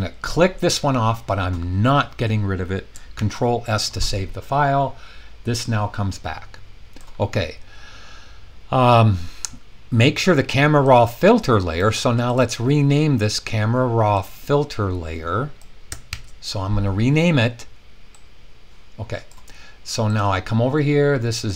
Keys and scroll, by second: 3.1 super+s, 16.1 super+c.